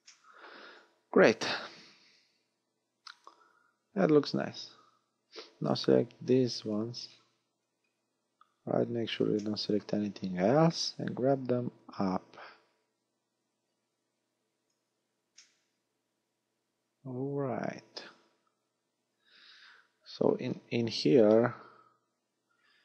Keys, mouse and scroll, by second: 0.1 shift+middle click, 0.7-1.5 scroll up 6, 6.2 b, 7.1 scroll down 5, 7.8 scroll down 3, 8.6-9.4 scroll up 8, 9.4 shift+middle click, 9.4 scroll up 1, 10.2 scroll up 2, 11.8 click, 15.4 middle click, 20.5 scroll down 4.